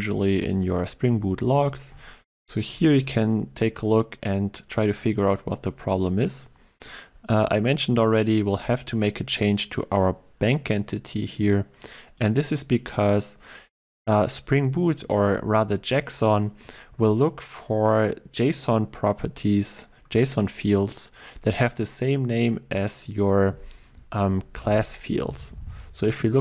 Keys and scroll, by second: 24.7 ctrl+e.